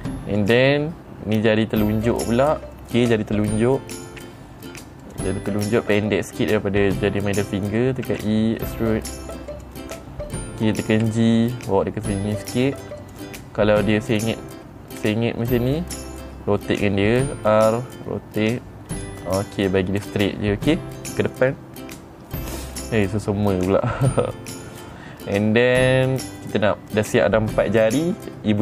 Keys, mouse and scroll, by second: 0.9 click, 2.1 middle click, 3.2 middle click, 5.5 click, 8.6 e, 10.0 click, 11.4 g, 13.5 click, 14.6-15.5 scroll up 2, 15.5 scroll down 1, 17.6 r, 19.4 click, 20.5 middle click, 20.5 scroll down 2.